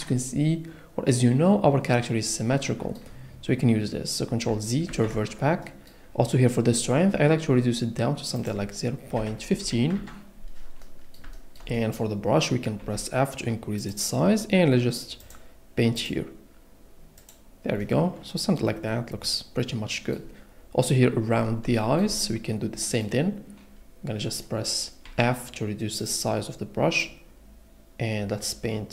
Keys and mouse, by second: 5.3 ctrl+z, 8.4-9.9 drag, 10.8 click, 12.8 f, 13.8 click, 15.4 click, 16.2 click, 17.4-18.6 drag, 24.4 click, 25.0 f, 26.0 click, 27.1 click.